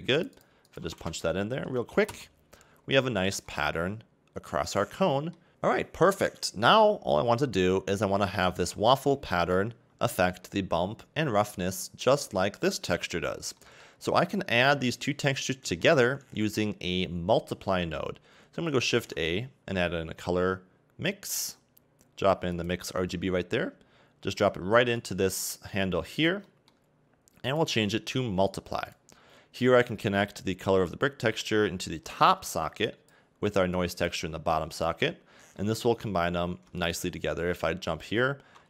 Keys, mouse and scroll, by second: 0.2 BackSpace, 2.9-3.5 scroll down 2, 3.5 middle click, 5.5 KP_1, 7.2 scroll up 2, 27.1 middle click, 30.2 click, 33.8 click, 36.9 ctrl+shift+click.